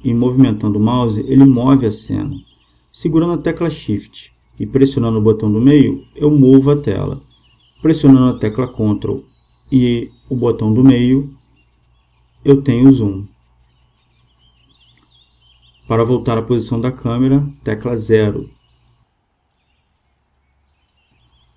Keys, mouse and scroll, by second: 6.2-18.4 middle drag, 18.4 KP_0.